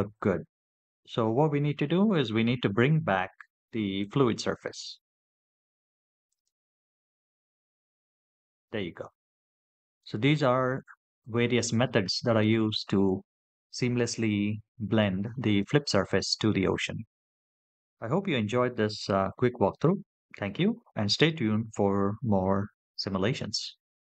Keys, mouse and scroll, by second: 1.5 scroll up 2, 2.2-3.8 scroll up 2, 3.8 click, 6.3 click.